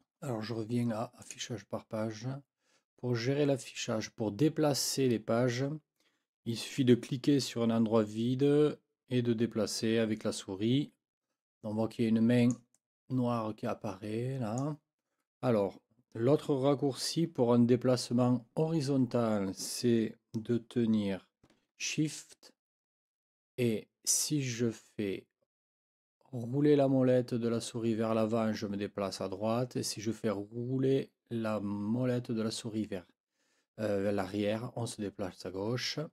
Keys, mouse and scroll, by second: 1.2 click, 6.7-8.9 scroll up 2, 8.9 click, 9.0 scroll up 4, 9.1 click, 9.3 click, 11.1-12.7 drag, 13.2-14.8 drag, 23.6-24.5 shift+scroll up 4, 25.2-25.5 shift+scroll up 2, 26.5 shift+scroll up 2, 27.1-28.7 shift+scroll up 6, 29.3-31.2 shift+scroll down 4, 32.0-32.4 shift+scroll down 2, 34.5-35.2 shift+scroll down 4, 35.7-36.1 shift+scroll up 4.